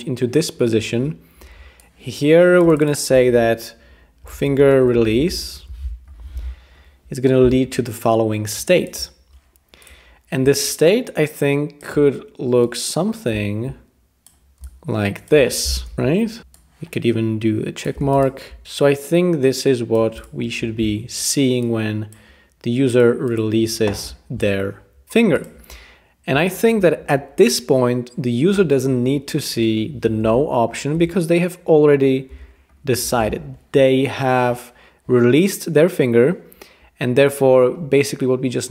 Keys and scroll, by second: 4.0-6.0 typing, 15.9 super+[, 15.9 BackSpace, 30.2 BackSpace, 30.9 BackSpace.